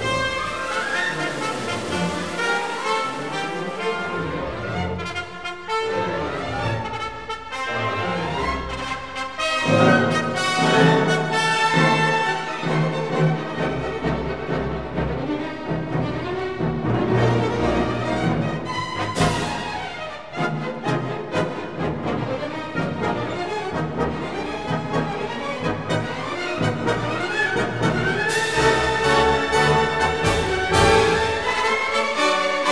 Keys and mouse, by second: 0.4 click, 1.7 Tab, 2.5 click, 2.9 shift+click, 3.7 e, 4.8 click, 5.9 KP_3, 6.1 alt+z, 6.7 g, 6.9 z, 9.4 click, 10.6 alt+z, 11.6 ctrl+KP_Add, 12.7 p, 13.8 Tab, 14.1 click, 15.1 KP_Divide, 17.3 Tab, 18.1 1, 18.5-19.1 drag, 19.6 f, 20.4 alt+z, 20.7 3, 21.4 click, 22.9 Delete, 24.7 alt+z, 25.5 Tab, 26.4-27.3 drag, 28.3 click, 28.8 click, 29.7 click, 30.4 Tab, 31.3 ctrl+r.